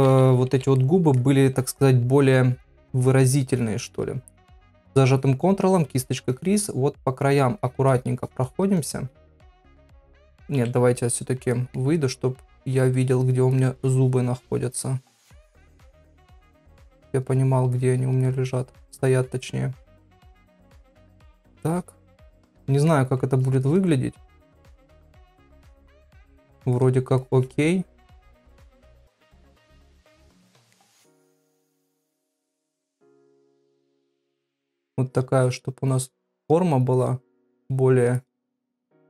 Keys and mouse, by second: 0.0 ], 0.8 middle click, 3.5 ctrl+click, 3.9 ctrl+click, 4.3 ctrl+click, 4.7 ctrl+click, 4.9 ctrl+click, 5.1 ctrl+click, 5.7 ctrl+click, 6.0 ctrl+click, 6.2 ctrl+click, 6.5 ctrl+click, 7.3 ctrl+click, 7.6 ctrl+click, 7.9 ctrl+click, 8.2 ctrl+click, 8.5 ctrl+click, 8.8 ctrl+click, 9.3 middle click, 10.9 KP_Divide, 11.5 middle click, 12.7 ctrl+click, 13.0 ctrl+click, 13.2 ctrl+click, 13.5 ctrl+click, 13.8 ctrl+click, 13.9 ctrl+click, 14.5 ctrl+click, 15.3 ctrl+click, 15.8 ctrl+click, 16.7 ctrl+click, 17.3 ctrl+click, 17.8 ctrl+click, 18.2 ctrl+click, 18.5 ctrl+click, 19.0 ctrl+click, 19.8 ctrl+click, 20.1 ctrl+click, 20.4 ctrl+click, 21.4 ctrl+click, 21.7 ctrl+click, 22.6 middle click, 23.4 ctrl+click, 23.6 ctrl+click, 24.9 ctrl+click, 25.1 ctrl+click, 25.7 ctrl+click, 26.5 ctrl+click, 26.7 ctrl+click, 27.2 ctrl+click, 27.9 ctrl+click, 28.2 ctrl+click, 29.6 ctrl+click, 30.4 middle click, 31.2 ctrl+click, 32.1 ctrl+click, 32.4 middle click, 33.3 ctrl+click, 33.7 ctrl+click, 34.1 ctrl+click, 34.6 ctrl+click, 35.1 ctrl+click, 35.4 ctrl+click, 35.9 ctrl+click, 36.4 ctrl+click, 37.0 ctrl+click, 37.3 ctrl+click, 38.0 ctrl+click, 38.2 ctrl+click, 38.5 middle click.